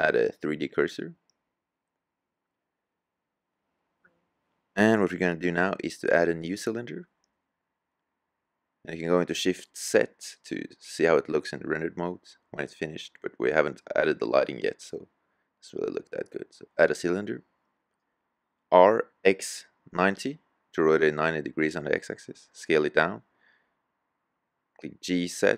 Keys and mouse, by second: 2.2-2.9 drag, 2.9-3.9 middle drag, 6.4 shift+z, 12.2 shift+z, 16.7-18.5 drag, 18.0 r, 21.0 s, 22.6 click, 23.2 middle click, 24.9 g.